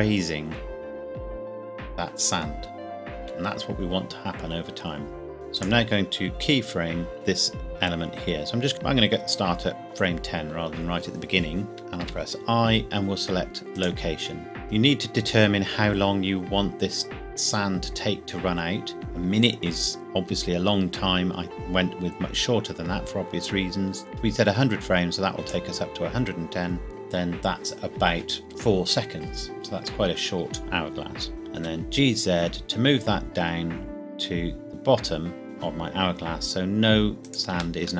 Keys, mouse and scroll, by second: 3.3 Escape, 5.3 click, 8.7 click, 12.1 i, 13.7 click, 24.1 click, 26.8-27.1 scroll down 1, 31.3 g, 31.6 z, 35.4 z, 37.3 shift+click.